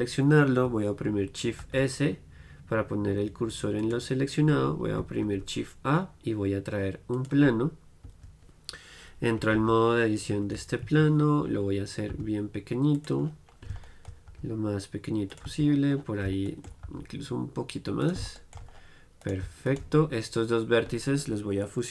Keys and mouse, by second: 1.7 shift+s, 5.4 shift+a, 8.2 Tab, 9.5 r, 12.2 s, 13.4-15.5 middle drag, 14.4 s, 15.5-17.4 drag, 15.5 z, 16.9 s, 18.2-20.1 drag, 19.3-21.9 right drag.